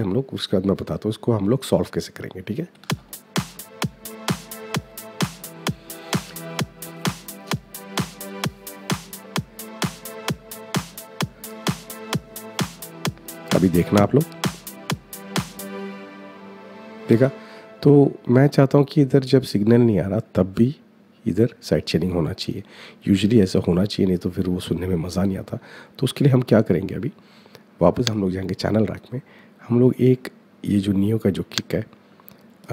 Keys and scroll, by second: 2.6 space.